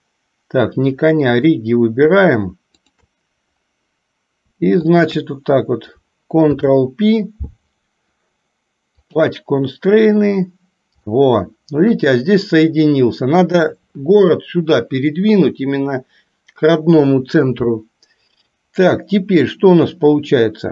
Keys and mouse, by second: 2.9 shift+click, 5.0 shift+click, 6.6 ctrl+p, 11.2-12.2 shift+middle drag.